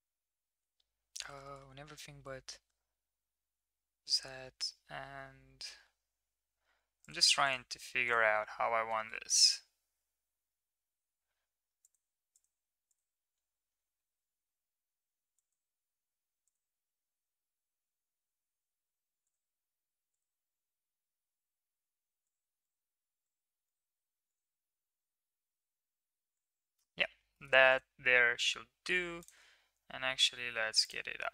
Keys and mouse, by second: 8.0 click, 8.8 g, 12.3 click, 13.7 g, 20.4 g, 23.2 click, 24.2 click, 24.6 g, 26.5 right click, 27.3 middle click, 27.6 click, 27.6 right click, 28.5 s.